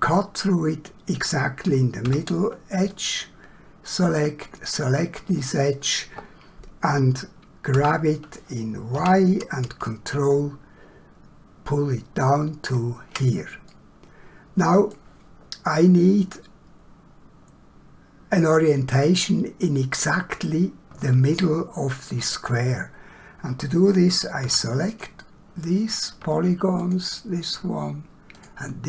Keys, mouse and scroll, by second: 2.0 2, 2.9 click, 7.8 g, 9.0 y, 13.7 middle click, 24.4 3, 24.9 click, 26.8 shift+click.